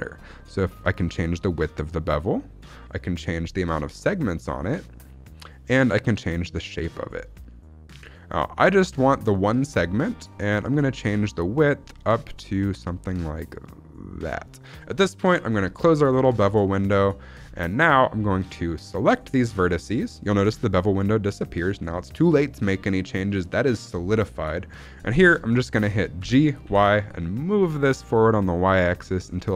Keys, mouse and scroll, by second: 0.5-2.5 drag, 3.1-5.2 drag, 5.9-8.3 drag, 8.6 click, 10.5-14.2 drag, 15.6 click, 16.0 scroll down 2, 16.4 shift+middle click, 16.9-17.2 scroll down 1, 17.2 scroll up 1, 17.5 shift+middle click, 17.7-18.4 scroll up 1, 18.4 click, 20.0 shift+middle click, 25.4 shift+middle click, 26.1 g, 26.5 y.